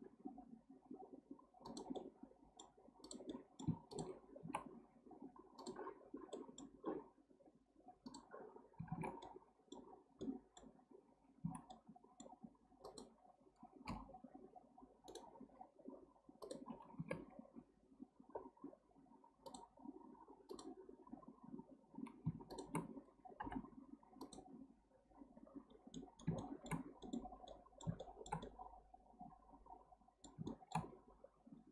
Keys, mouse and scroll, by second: 2.0-3.0 middle drag, 3.0 drag, 3.3 middle click, 3.9 shift+click, 4.4 s, 6.3-8.2 middle drag, 8.2 click, 8.6 scroll down 1, 8.9 alt+z, 9.2-9.9 middle drag, 9.9 scroll up 3, 10.2-10.8 middle drag, 10.8-11.4 scroll up 1, 11.4 scroll up 1, 11.4 1, 11.7-12.9 middle drag, 12.9 click, 13.8 m, 15.5-16.4 scroll up 2, 16.4 drag, 17.0 x, 19.5 drag, 20.5 click, 22.5 shift+click, 23.4 m, 25.4-25.9 scroll down 6, 25.9-30.9 middle drag, 30.9-31.4 scroll up 3, 31.4-31.7 scroll down 1.